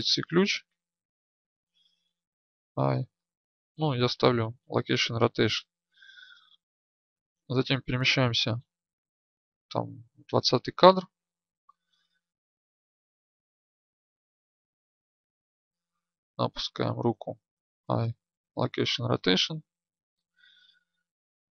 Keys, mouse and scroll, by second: 4.9 i, 7.8-10.8 Right, 11.1 Right, 14.1-16.3 drag, 18.5 i, 20.7-21.2 Right.